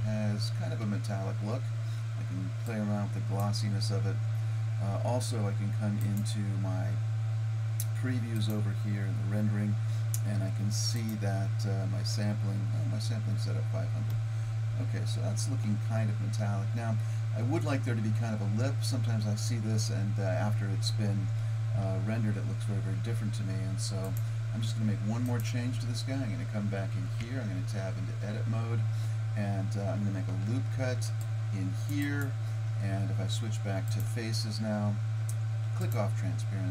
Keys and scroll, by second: 27.3 Tab, 30.8 ctrl+r.